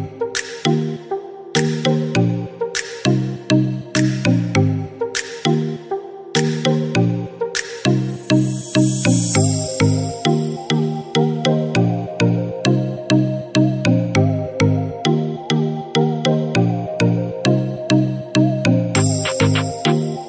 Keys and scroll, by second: 0.6-1.4 typing, 9.6-10.5 typing, 15.3 typing, 16.6-17.5 typing.